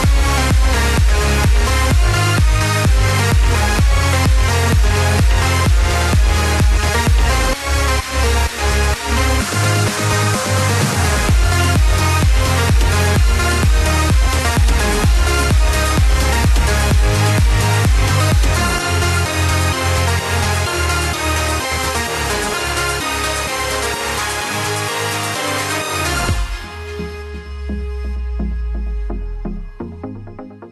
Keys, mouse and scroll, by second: 4.1-6.8 drag, 8.1 ctrl+KP_Add, 9.2 KP_1, 11.9 r, 14.6 g, 22.1 b, 24.8 z, 27.2 b.